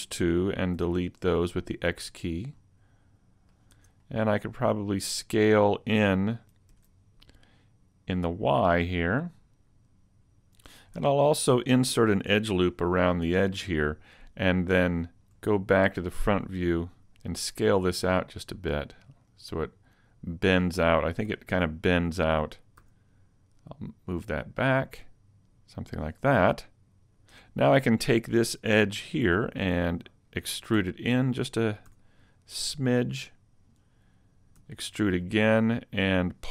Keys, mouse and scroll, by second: 0.8 x, 2.5 middle click, 3.7 Tab, 4.0 scroll up 1, 4.2 middle click, 6.7 ctrl+alt+Right, 8.7 click, 11.0 Tab, 12.3 ctrl+r, 13.3 click, 15.3 KP_1, 17.4 s, 21.3 a, 21.5 Tab, 22.8 s, 25.6 click, 27.4 Tab, 28.9 alt+right click, 30.7 e, 31.2 click, 31.9 s, 33.3 click, 34.6 e, 34.9 click, 35.3 middle click.